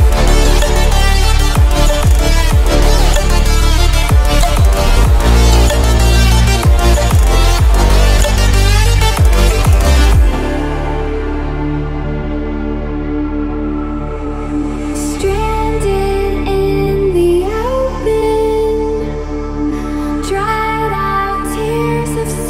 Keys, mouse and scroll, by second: 5.1 ctrl+0, 7.8 click, 15.0 click, 16.4 shift+m, 18.0 ctrl+a, 20.1 click.